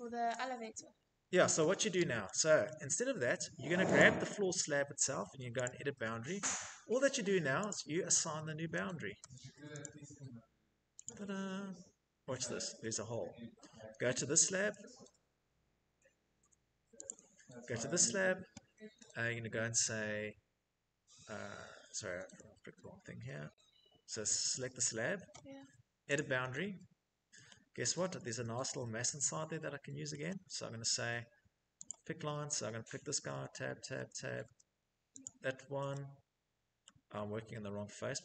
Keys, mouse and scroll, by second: 0.4 Delete, 1.0 middle click, 1.0 middle click, 1.1 middle click, 2.0 shift+middle click, 3.3 click, 4.9 click, 7.0 click, 7.9 Tab, 8.5 Tab, 9.1 click, 10.3 click, 11.9 Escape, 14.5 click, 14.6 Tab, 15.2 Tab, 15.7 Tab, 21.3 Escape, 21.7 scroll, 23.6 click, 25.4 click, 26.3 scroll, 29.4 middle click, 29.6 middle click, 29.6 middle click, 29.8 middle click, 31.1 right click, 32.3 Tab, 32.7 Tab, 33.2 Tab, 33.7 Tab.